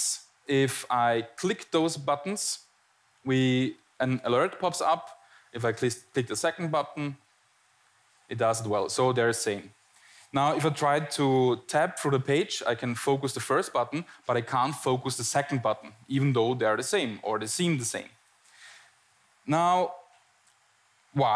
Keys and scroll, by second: 10.9 Tab, 12.1 Tab, 12.9 Tab.